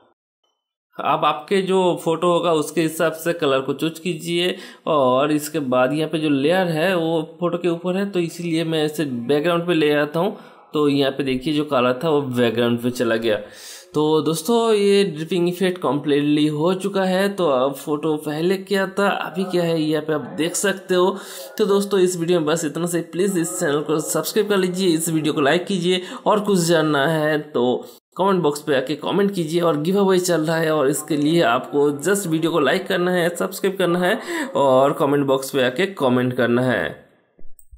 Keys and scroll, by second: 31.2 ctrl+z.